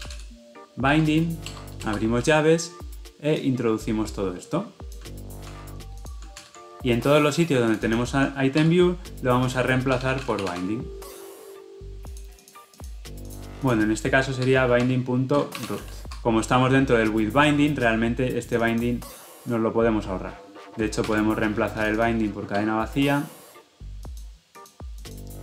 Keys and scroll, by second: 1.4 Return, 5.4 ctrl+x, 6.5 ctrl+v, 6.8 ctrl+alt+l, 8.6 ctrl+r, 16.1 Escape, 21.0 ctrl+r.